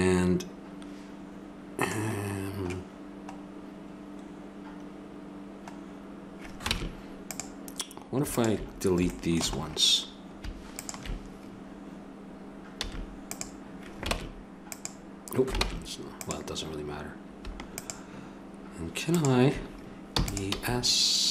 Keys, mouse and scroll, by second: 3.0-5.0 middle drag, 6.7 ctrl+Tab, 8.8-10.3 middle drag, 10.3-12.2 middle drag, 10.7-12.5 drag, 12.8 x, 14.1 ctrl+Tab, 15.6 ctrl+Tab, 17.7-20.9 drag, 20.1 e, 20.4 s.